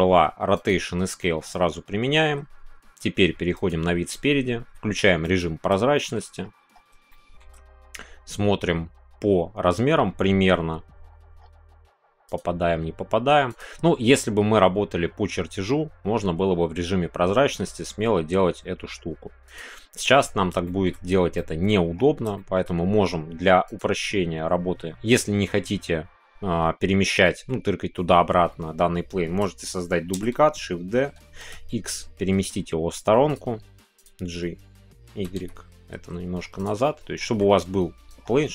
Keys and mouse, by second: 1.1 shift+middle click, 5.2 click, 5.9 shift+middle click, 7.1 shift+middle click, 13.4 click, 19.4-20.5 drag, 20.6 shift+middle click, 21.3 middle click, 22.3 shift+middle click, 23.7-25.1 drag, 25.1 middle click, 27.2 middle click, 30.1 shift+d, 31.4 x, 36.5 click, 36.5 y, 36.8 middle click.